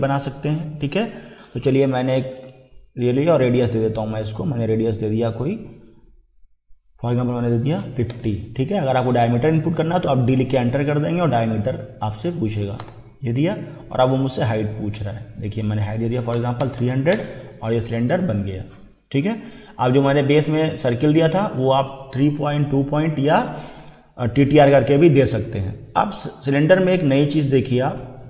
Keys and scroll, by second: 7.8 5, 8.1 0, 12.8 Return, 16.4 3, 16.6 0, 17.1 Return.